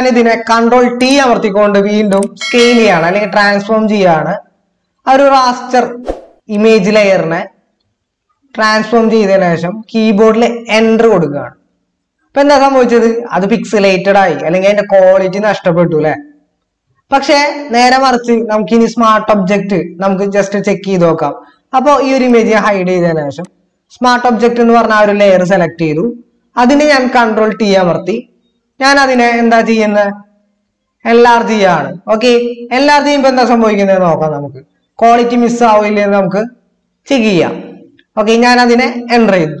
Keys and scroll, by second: 1.2 ctrl+t, 11.0 Return, 27.5 ctrl+t, 39.2 Return.